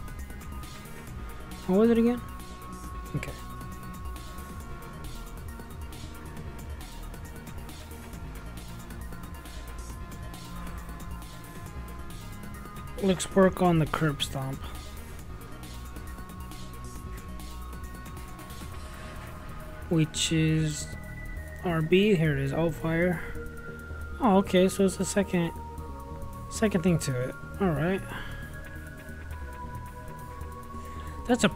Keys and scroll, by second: 0.3-1.2 typing.